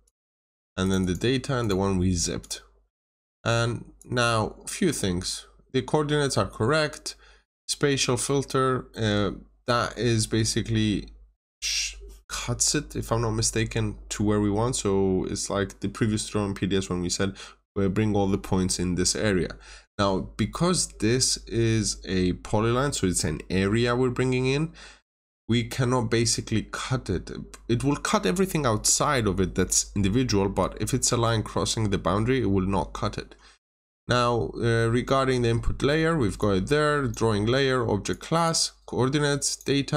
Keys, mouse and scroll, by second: 0.0 double click, 0.8 click, 0.9 double click, 1.5 click, 36.3 click.